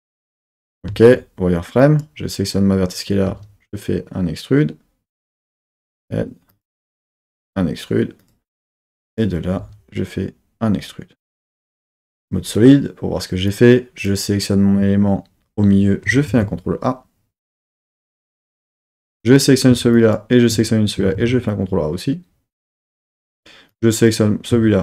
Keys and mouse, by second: 0.3 click, 0.9 z, 1.8 click, 3.3 e, 6.5 click, 6.5 z, 7.1 e, 8.2-9.5 drag, 9.6 e, 11.6 click, 11.9 z, 13.5 click, 16.2 ctrl+a, 18.7 click, 19.9 shift+click, 21.1 ctrl+a, 23.1 click.